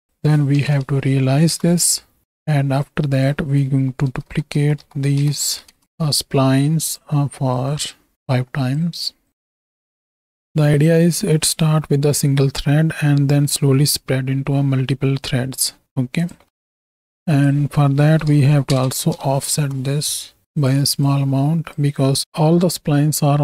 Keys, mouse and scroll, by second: 2.8-5.8 drag, 7.5-8.1 drag, 8.2 click, 9.3-10.4 drag, 16.6 middle click, 17.2-19.6 drag, 20.5 drag, 21.2-21.8 drag, 22.0 click.